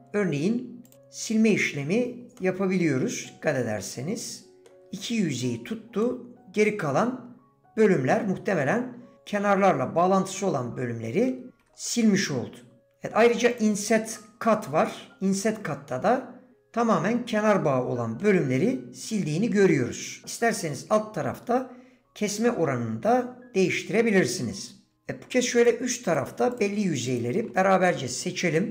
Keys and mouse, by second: 0.9 middle click, 2.4-4.7 middle drag, 6.0-7.8 middle drag, 10.4 middle click, 11.9 ctrl+z, 11.9 middle click, 15.9 middle click, 17.5 middle click, 25.6 click, 27.6 middle click.